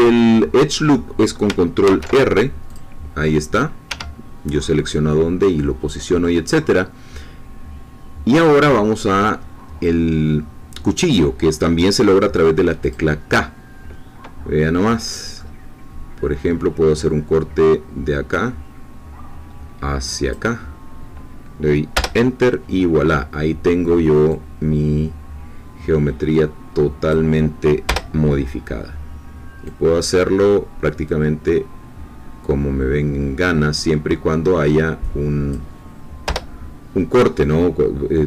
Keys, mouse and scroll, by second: 1.8 ctrl+r, 2.6 click, 3.8 Escape, 12.8 click, 14.9-18.3 middle drag, 18.3-21.9 drag, 22.5 Return, 24.3-27.3 drag, 28.4 Return, 29.6-35.7 drag, 36.2 Return.